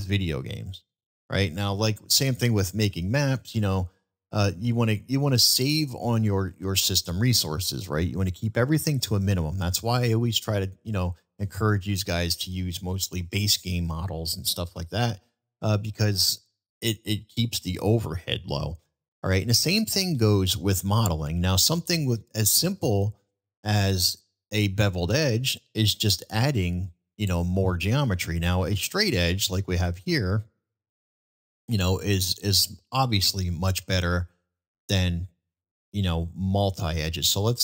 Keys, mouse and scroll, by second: 20.1-20.5 middle drag, 25.6 middle click, 28.7 ctrl+b.